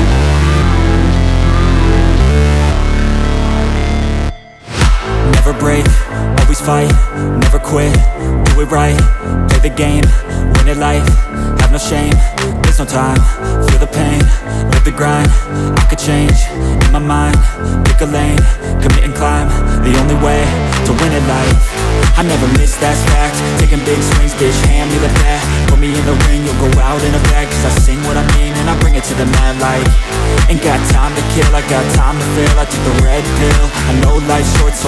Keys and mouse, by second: 0.1 s, 0.8 KP_7, 1.5 r, 3.1 s, 4.1 click, 4.5 s, 4.9 middle click, 5.2-7.9 drag, 7.2 s, 7.9 middle click, 8.2-10.5 drag, 9.1 s, 9.9 s, 10.5 middle click, 11.1 click, 11.6 s, 12.0 middle click, 12.2-14.8 drag, 14.5 s, 14.8 middle click, 15.1-19.7 drag, 16.9 ctrl+z, 17.9 s, 18.9 s, 19.7 middle click, 19.9-33.2 drag, 33.2 middle click, 33.7 shift+d, 34.2-34.8 drag.